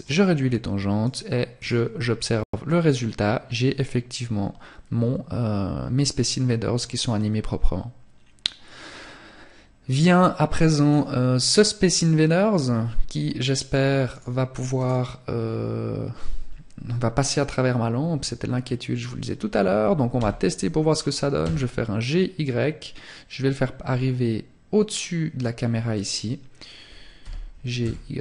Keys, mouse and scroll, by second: 0.7 click, 10.3 right click, 13.0 right click, 25.0 click, 26.1 g, 28.1 click.